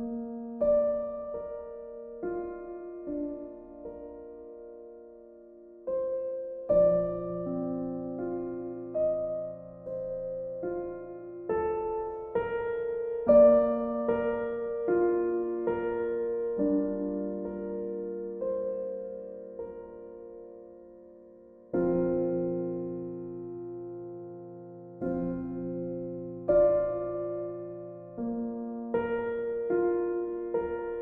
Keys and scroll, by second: 7.0 ctrl+e, 22.2 b.